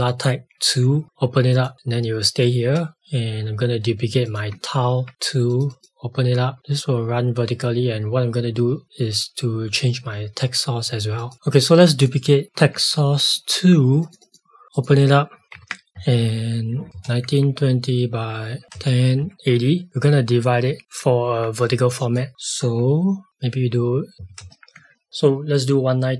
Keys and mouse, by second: 15.9 KP_1, 16.7 KP_9, 16.9 KP_0, 17.2 Tab, 18.6 KP_1, 19.1 KP_8, 19.3 KP_0, 20.8 click, 23.3 /, 24.1 KP_1, 24.3 KP_0, 24.7 Tab.